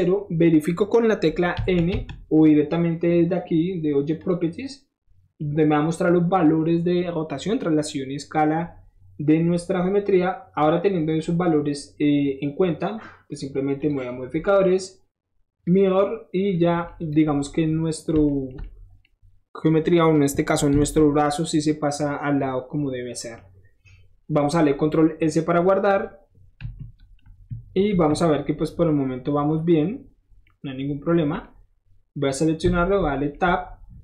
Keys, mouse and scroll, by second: 1.9 n, 4.2 click, 10.7 click, 13.8 click, 15.6 click, 16.4 middle click, 17.0 click, 18.1 shift+middle drag, 18.5 shift+middle click, 20.7 ctrl+s, 24.8-26.7 middle drag, 26.7 KP_1, 27.4 KP_3, 27.9 KP_1, 29.7-31.7 middle drag, 32.2 click, 32.7 Tab.